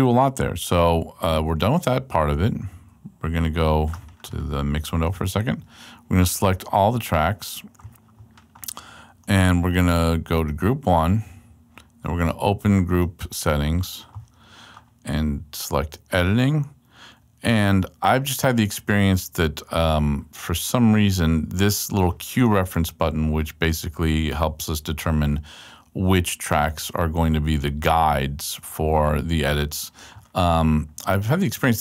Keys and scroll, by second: 2.7 x.